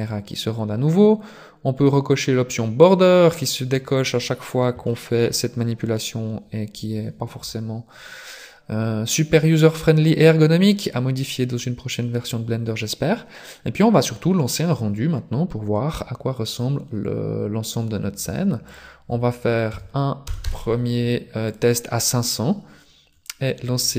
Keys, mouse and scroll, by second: 0.0 click, 1.6-2.8 scroll up 7, 2.8 click, 4.2-4.9 scroll down 1, 4.9 shift+middle click, 5.6 scroll up 2, 5.7 scroll down 1, 16.4 scroll down 3, 18.6 click, 20.4 KP_0, 22.8-23.6 scroll up 10.